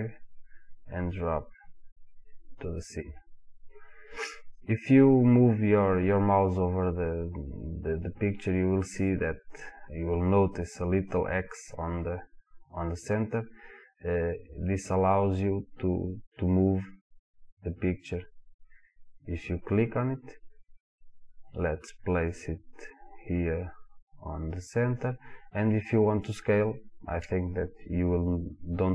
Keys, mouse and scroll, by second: 2.9 click, 14.2-24.7 drag.